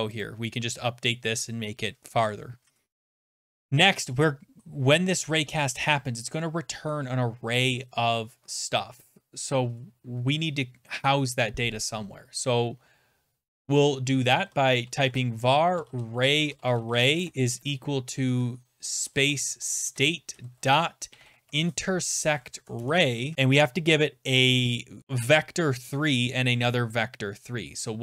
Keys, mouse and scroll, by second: 0.2 click, 3.4 Return, 14.0-22.6 typing, 22.8 Return.